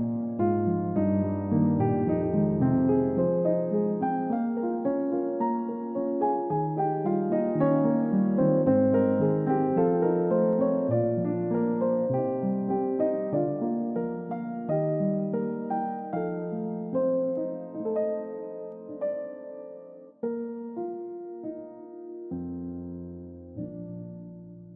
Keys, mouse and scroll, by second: 0.1-1.1 scroll up 1, 1.6-3.7 scroll down 1, 4.7 Delete, 4.9 middle click, 5.9-7.1 scroll up 1, 15.8-16.3 scroll down 1, 16.4 alt+click, 17.0 scroll down 1, 17.6 alt+middle click, 17.9 alt+click, 19.9 scroll down 1, 20.1 alt+click, 20.6-20.9 scroll up 1, 21.0 alt+click, 21.6-22.2 scroll down 2, 21.8 alt+click, 22.4 alt+click, 23.2 scroll up 1, 23.7 scroll down 1, 24.2 middle click.